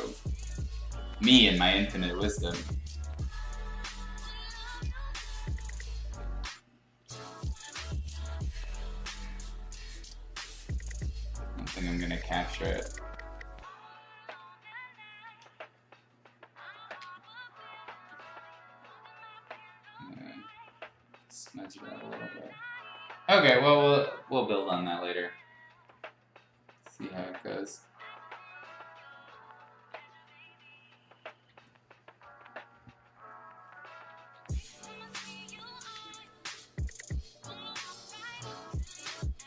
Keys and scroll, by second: 0.0-0.8 typing, 2.1 ctrl+z, 4.4 ctrl+z, 5.2 ctrl+z, 5.4 ctrl+z, 6.7-8.2 typing, 12.8-14.5 typing, 16.7 z, 17.0 x, 18.0 ctrl+z, 23.9 ], 27.0 ctrl+z, 29.2 ], 31.5 ctrl+z, 34.3 ], 34.5 ], 35.9 ctrl+z, 38.6 ctrl+z.